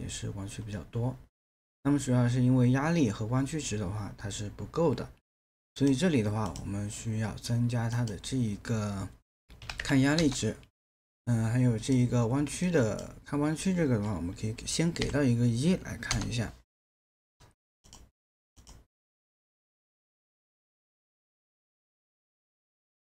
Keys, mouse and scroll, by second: 9.6 KP_3, 9.8 KP_0, 10.2 Return, 15.0 KP_1, 16.1 Return.